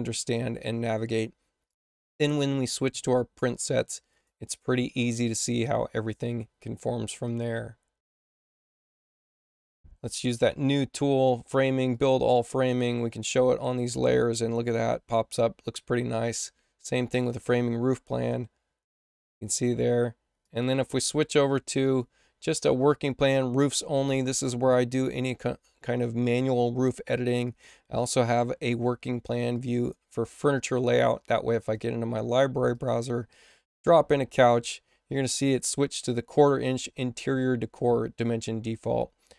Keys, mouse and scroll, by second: 1.6 click, 2.8 click, 4.0 click, 5.2 click, 7.2 click, 8.3 click, 10.2 click, 11.8 click, 13.0 click, 16.2 click, 17.0 click, 20.3 click, 21.7 click, 27.4 click, 29.4 click, 31.5 click, 32.6 click, 34.3 click.